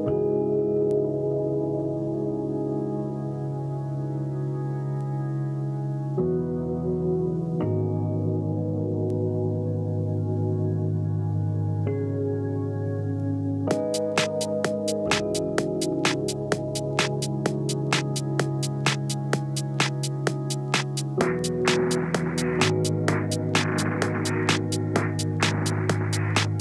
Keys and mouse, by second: 0.9 s, 1.6-7.0 middle drag, 4.5 shift+d, 5.2 s, 6.2 s, 7.0-9.2 drag, 7.7 KP_7, 8.4 s, 9.2-19.6 middle drag, 9.6 r, 10.0 g, 11.8 g, 12.5 r, 12.9 g, 14.0 g, 15.7 shift+d, 16.2 r, 17.2 g, 18.6 s, 19.6-23.5 drag, 23.5 middle click, 23.7-26.6 drag.